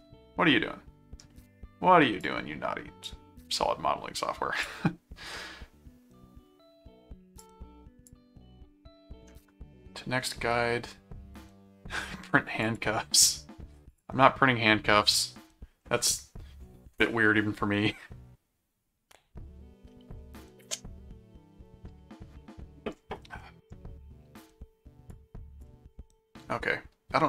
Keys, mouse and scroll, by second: 1.5-1.8 scroll up 2, 2.2 click, 4.2 click, 7.4 click, 12.6 click, 13.9 click, 23.4 middle click, 25.1 click.